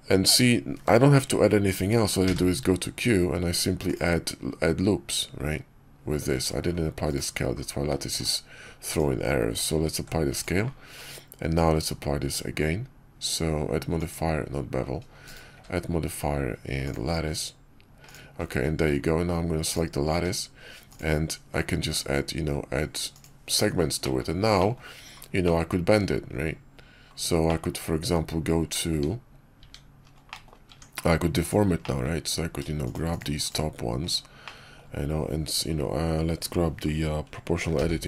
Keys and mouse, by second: 2.1 q, 6.9 middle drag, 7.9 x, 9.6 ctrl+a, 10.8 q, 15.4 q, 17.9 drag, 19.6 click, 19.6 q, 20.0 q, 23.9 middle drag, 24.5 middle click, 25.3 middle click, 27.4 middle click, 28.8 Tab, 29.5 Tab, 30.2 click, 30.6 Tab, 31.3 click, 31.7 click, 33.3 shift+click, 34.3 click, 37.6 o.